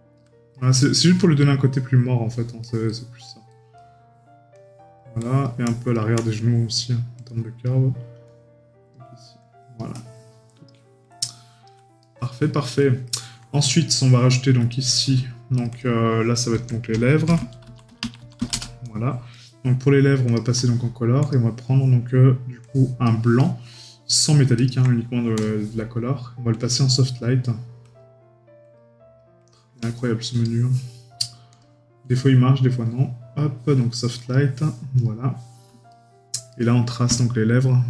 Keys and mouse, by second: 0.5 right click, 2.6 right click, 12.0 right click, 13.1 middle click, 19.3 right click, 35.9 right click.